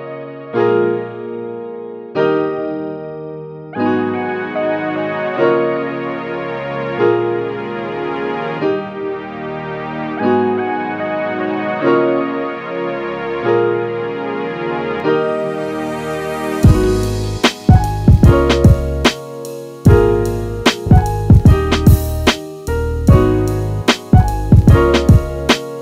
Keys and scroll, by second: 4.1 super+-.